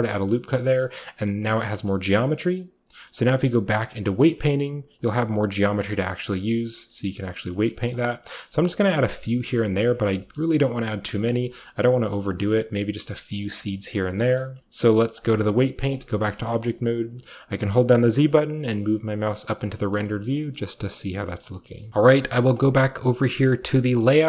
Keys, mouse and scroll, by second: 0.0-1.3 ctrl+drag, 0.6-4.1 middle drag, 0.6-1.3 scroll down 1, 1.3-2.4 scroll down 1, 2.4-3.0 shift+scroll down 1, 3.0 shift+scroll down 1, 3.1-4.1 drag, 4.3-6.0 scroll up 1, 4.9 click, 5.2 click, 5.7-7.5 drag, 8.2-10.1 shift+drag, 8.5-9.1 shift+scroll up 1, 9.1-9.7 shift+scroll down 1, 9.7 middle click, 10.9-12.5 scroll up 1, 11.1 click, 11.8 shift+click, 12.0 shift+click, 12.2 shift+click, 12.5-13.4 shift+scroll down 1, 13.0 shift+click, 13.4 click, 13.8 click, 13.8-14.6 scroll down 1, 14.1-16.0 middle drag, 14.6-15.9 scroll up 1, 15.1-17.5 drag, 16.5 a, 17.5-19.0 typing, 19.0 scroll down 2, 19.3-19.7 middle drag, 19.9 middle drag, 20.1-20.8 shift+scroll down 1, 20.2 shift+middle click, 20.5-20.8 shift+middle drag, 20.9 middle drag, 21.4 middle drag, 21.7 scroll up 1, 21.7-23.7 middle drag, 22.5-23.7 drag, 23.7 scroll down 1, 23.9-24.2 middle drag.